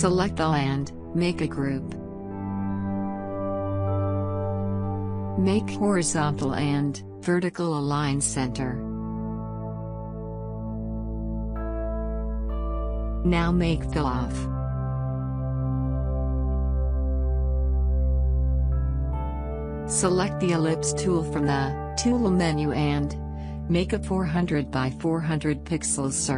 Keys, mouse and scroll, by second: 1.5 right click, 3.5 click, 6.8 click, 16.3 click, 20.3 right click, 22.0 click, 22.0 click, 24.9 click.